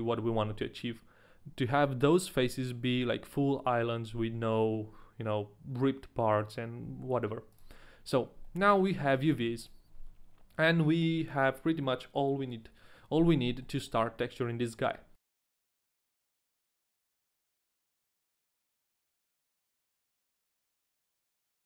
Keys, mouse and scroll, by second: 7.6 click, 8.4 middle click, 8.9 a, 9.1 right click, 9.5 click, 9.5 middle click, 9.5 right click, 9.5 a.